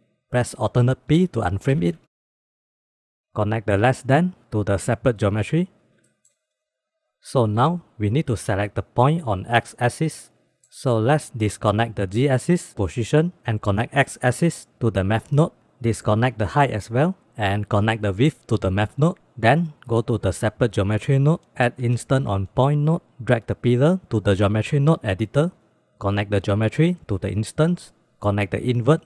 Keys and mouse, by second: 1.2 alt+p, 2.2 click, 3.0 drag, 3.4-5.5 drag, 6.5 drag, 10.6-11.1 drag, 11.4-12.5 ctrl+drag, 13.4-14.9 drag, 16.3 ctrl+click, 17.7-18.8 drag, 20.2 click, 21.0-21.3 drag, 21.4 ctrl+shift+z, 21.9 shift+a, 23.9 click, 25.3 click, 25.7 click, 26.0-27.6 drag, 28.8-29.0 drag.